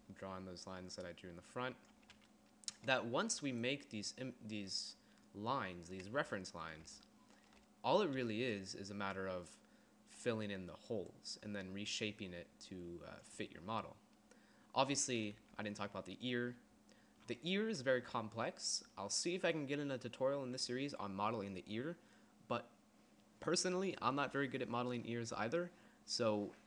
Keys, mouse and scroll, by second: 2.1 d, 2.5 d, 3.5 d, 5.2 d, 6.6 d, 8.4-11.2 d, 13.5 d, 14.9 d, 15.8 d, 16.3 d, 16.4-17.5 d.